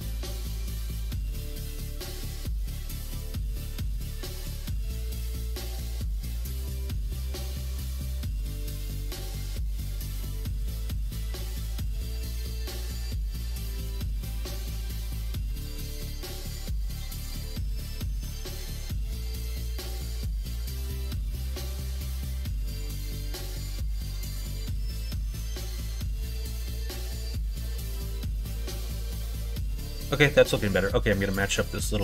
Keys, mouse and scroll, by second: 1.0 ctrl+z, 1.7 middle click, 3.1 middle click, 4.4 alt+shift+click, 6.2 alt+shift+click, 6.5 middle click, 7.8 alt+shift+click, 8.1 middle click, 8.8 ctrl+b, 12.2 ctrl+z, 13.2 ctrl+z, 13.9 middle click, 15.0 ctrl+z, 15.6 middle click, 16.3 ctrl+b, 19.5 middle click, 20.6 alt+click, 21.0 middle click, 21.5 ctrl+b, 24.5 click, 25.4 click, 25.7 middle click, 26.9 middle click, 27.6 middle click, 27.9 Tab, 28.5 click, 28.7 middle click, 29.4 middle click, 29.8 middle click, 30.4 middle click, 31.6 middle click.